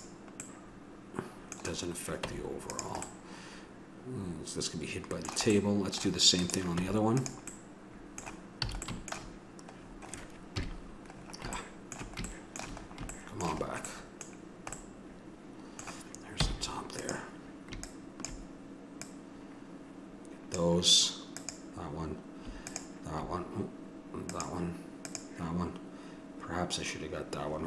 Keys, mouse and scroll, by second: 1.1 middle click, 1.4 middle click, 2.3 Tab, 5.1 middle click, 6.4 click, 6.7 Tab, 7.5 click, 7.8 middle click, 8.7 a, 10.5 KP_Decimal, 11.1-12.2 middle drag, 14.3-19.2 middle drag, 16.4 c.